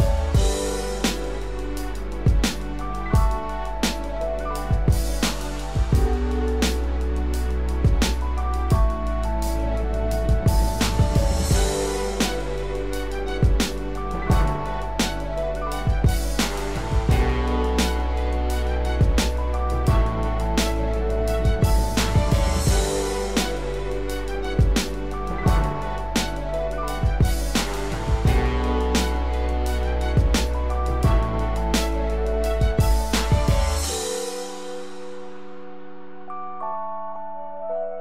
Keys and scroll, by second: 12.4 ctrl+=, 25.1 ctrl+z.